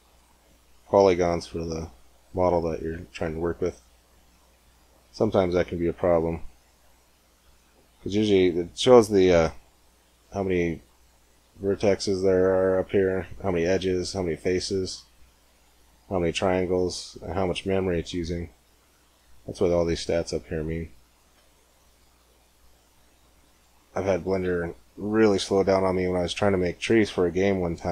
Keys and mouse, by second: 0.9 g, 2.8 middle click, 4.3 middle click, 21.8-23.3 middle drag, 23.3-25.3 right drag, 24.3 g.